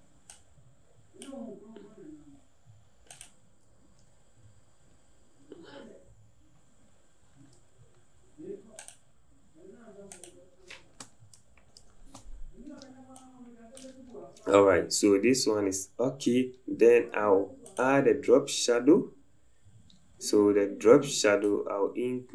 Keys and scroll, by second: 4.3 Up, 4.4 Up, 4.9 Down, 5.4 Down.